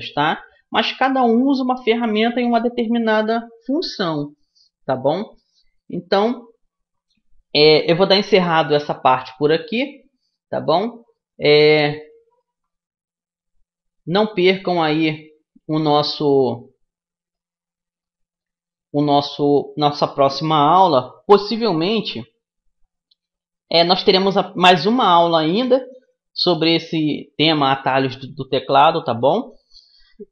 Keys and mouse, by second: 10.9-17.7 middle drag.